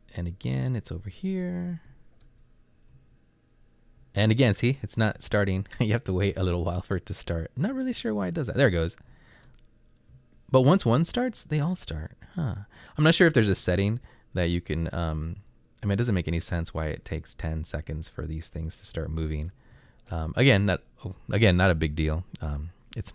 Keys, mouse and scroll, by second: 0.1 Right, 0.3 Right, 1.7 Up, 1.9 space, 3.0 Down, 4.0 Up, 4.6 Up, 5.2 Up, 6.4 Down, 6.6 Down, 7.0 Right, 7.5 Up, 8.0 Up, 9.2 Up, 9.2 space, 10.2 Down, 11.1 Up, 11.6 Up, 14.4 Right, 14.9 Up, 16.6 Right, 19.6 Up, 19.8 space.